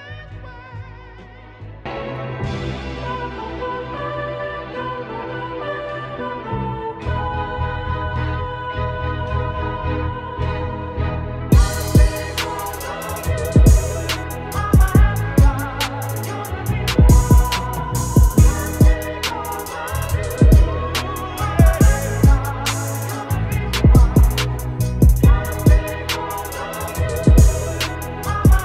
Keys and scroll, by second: 1.0 ctrl+t, 1.7 Down, 1.9 Down, 2.3 Return, 2.8 j, 3.0 t, 7.8 ctrl+Return, 9.9 ctrl+t, 12.6 Return, 14.5 BackSpace, 14.6 BackSpace, 17.6 ctrl+shift+g, 19.4 b, 22.3 ctrl+z, 25.3 ctrl+t, 28.0 Return.